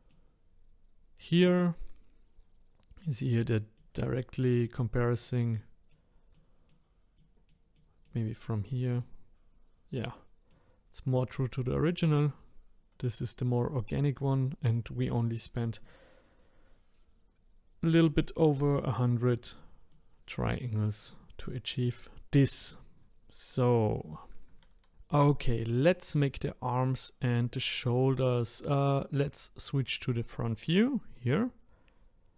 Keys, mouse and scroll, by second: 1.8-3.7 middle drag, 3.9 middle click, 4.8 middle click, 7.2-8.3 middle drag, 8.3-9.0 scroll down 2, 9.0-12.0 middle drag, 19.9-23.8 middle drag, 26.1 click, 27.8-31.0 middle drag.